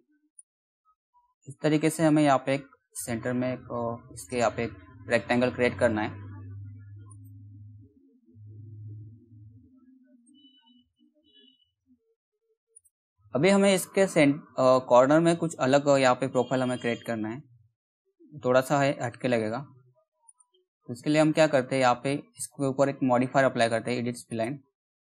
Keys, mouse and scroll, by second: 6.7 right click, 8.1 click, 13.1-14.0 scroll up 1, 14.0-15.9 scroll down 1, 15.9 scroll down 1, 17.3-17.9 scroll down 1, 19.6 scroll up 1, 19.9 click, 23.9-25.1 drag.